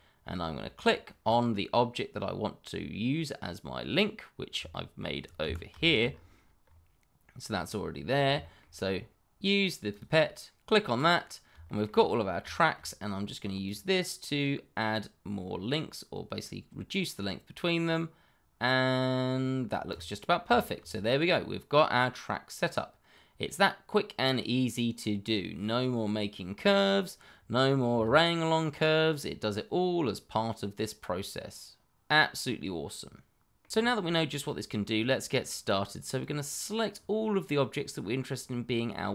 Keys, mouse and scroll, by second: 4.7 shift+middle click, 4.7 middle click, 4.9 shift+middle click, 5.4 Escape, 5.8 shift+middle click, 6.1-6.6 scroll up 1, 7.5-8.3 scroll down 1, 8.3 scroll, 8.4 shift+middle click, 9.9 click, 11.6 shift+middle click, 11.7 middle click, 11.7 shift+middle click, 11.9-12.5 scroll up 1, 12.5 shift+middle click, 12.6 middle click, 12.6 shift+middle click, 13.6 click, 20.2 scroll down 1, 20.5 shift+middle click, 20.9 middle click, 29.1 middle click, 36.2 click.